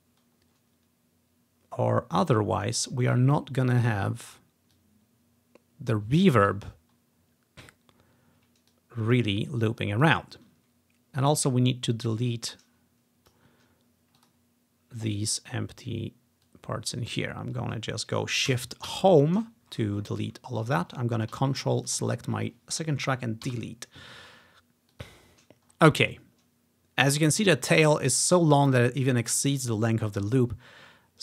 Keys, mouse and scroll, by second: 2.8 click, 3.3 ctrl+scroll down 2, 4.3 click, 4.8 click, 6.6 ctrl+click, 6.9-7.3 ctrl+scroll up 1, 7.3-7.7 ctrl+scroll down 1, 7.7 ctrl+scroll up 1, 8.8-10.2 drag, 11.4-13.8 drag, 14.3 click, 16.5 click, 17.4 ctrl+scroll down 1, 19.0 shift+Home, 19.8-20.3 ctrl+scroll down 1, 20.3 scroll up 1, 21.9 ctrl+click, 23.5 Delete, 25.0-26.3 drag, 25.7-26.3 ctrl+scroll down 1, 26.3 typing, 27.5 click, 29.5-31.2 drag.